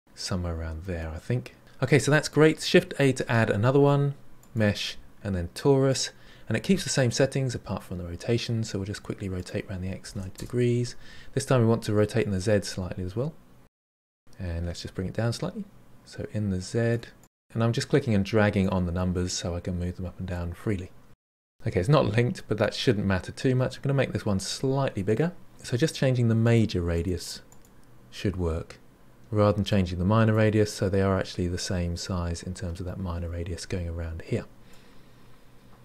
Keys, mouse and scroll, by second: 0.7-1.1 scroll up 6, 1.1 Return, 3.0 shift+a, 9.3-13.4 drag, 13.7-15.5 drag, 15.7-16.9 drag, 17.4-20.4 drag, 21.1-24.6 middle drag, 26.4-29.6 drag, 29.6-32.6 middle drag, 34.6-35.8 middle drag.